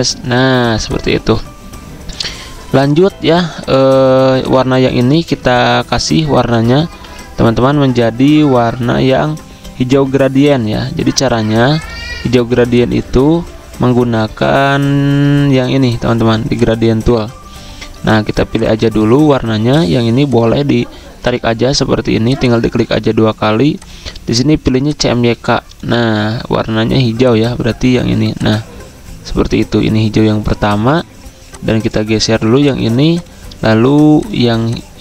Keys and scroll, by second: 0.5 v, 3.2 ctrl+2, 5.1 ctrl+z, 7.4 ctrl+z, 13.3 ctrl+z.